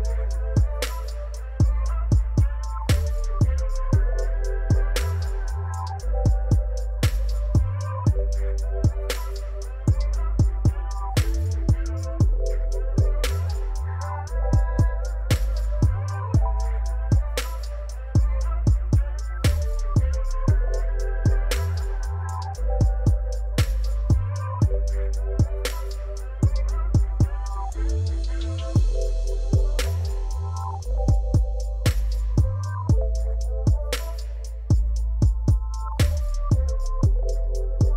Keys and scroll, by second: 2.0 shift+z, 5.1 2, 5.5 Return, 11.2 alt+a, 23.2 alt+a, 32.9 Tab, 34.6 shift+s, 36.9 Tab, 37.4 shift+a.